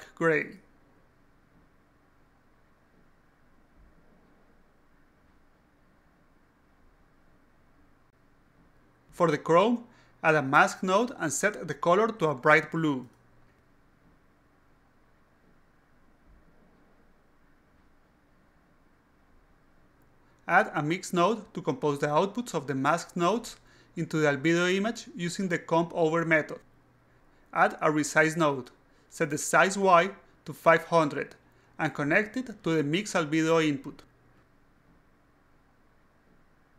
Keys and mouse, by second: 0.6 click, 1.3 click, 5.7 click, 6.2-7.5 typing, 9.3 drag, 9.8-10.8 drag, 11.3 click, 12.2 click, 12.3 click, 12.7 click, 12.9-14.5 typing, 14.9 click, 15.5 click, 17.1 click, 20.6 click, 21.0 click, 22.4 click, 23.2 click, 23.7 click, 24.2 click, 25.3 click, 25.4-26.9 typing, 28.5 click, 29.4 click, 30.1 click, 31.3 alt+click, 32.9 click, 34.9 click, 35.1 d, 35.6-36.7 drag.